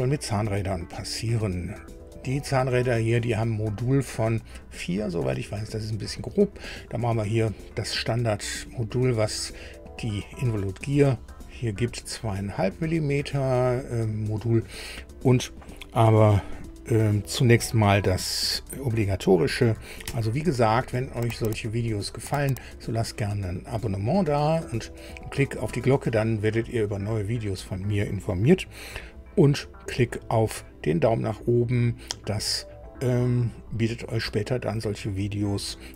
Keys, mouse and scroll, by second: 20.0 super+u.